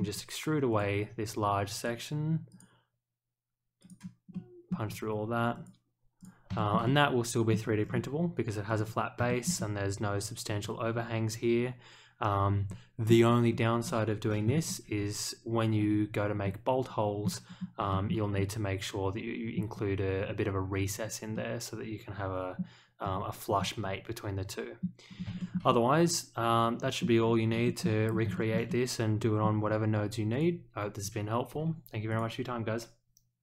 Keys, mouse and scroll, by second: 0.7 click, 1.7 click, 2.5 click, 3.8 click, 4.3-4.6 middle drag, 4.8 scroll up 1, 5.5 click, 6.1 click, 6.5 shift+middle click, 6.8-7.5 middle drag, 8.6 click, 9.2 shift+middle click, 9.5-13.0 middle drag, 13.8 click, 16.4 middle click, 17.4 scroll down 1, 17.9 shift+middle click, 18.3-19.5 middle drag, 20.3 scroll down 2, 21.3-22.5 middle drag, 23.0-23.3 scroll up 1, 23.5-24.8 middle drag, 25.0 scroll up 1, 25.3 shift+middle click, 25.6-27.0 middle drag, 27.6 shift+middle click, 28.3 shift+middle click, 28.6-29.4 middle drag, 29.6-30.0 scroll up 1, 30.3 click, 32.1 click.